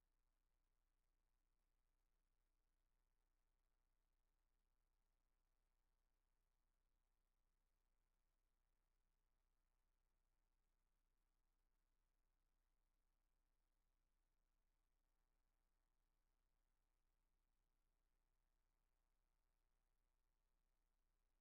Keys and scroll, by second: 3.3 z, 3.8 z, 5.4 shift+super+z, 6.4 typing, 6.4 shift+super+z.